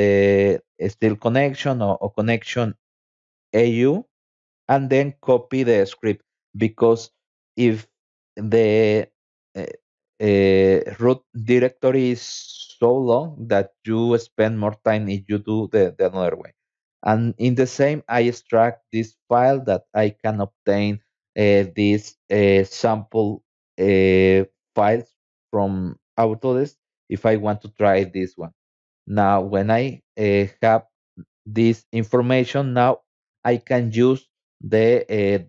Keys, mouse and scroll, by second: 5.7 click, 5.9 click, 6.9 click, 8.3 click, 11.2 click, 11.3 click, 11.8 click, 12.3 v, 13.6 click, 15.3 click, 15.7 right click, 20.0 click, 24.1 click, 24.3 click, 27.9 click, 29.0 click, 30.9 click, 35.0 click.